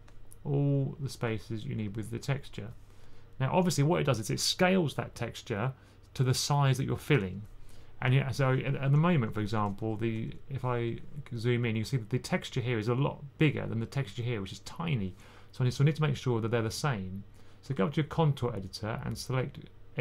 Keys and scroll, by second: 9.1-11.2 typing.